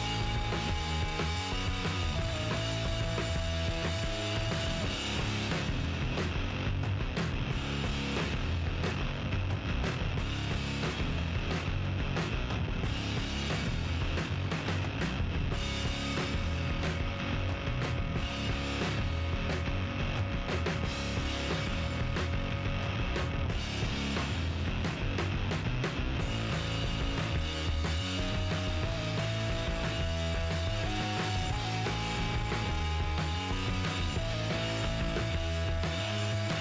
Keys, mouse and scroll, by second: 1.0-9.1 middle drag, 9.8-15.2 middle drag, 13.8 KP_3, 16.5-22.1 middle drag, 19.6-23.9 right drag, 22.5-23.8 drag, 23.3 g, 23.8 middle click, 24.6-26.3 middle drag, 28.1 middle click, 28.4 middle click, 28.6 Tab, 28.9-30.7 right drag, 30.7-33.8 middle drag, 32.6 g, 34.2 middle click, 36.2 right click, 36.5 Tab.